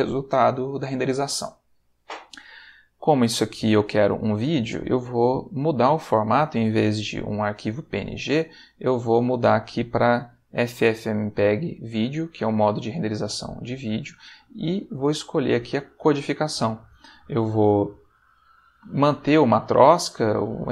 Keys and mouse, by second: 1.2 middle click, 8.2 click, 8.9 click, 12.2 click, 12.9 middle click, 14.6 click, 19.6 click.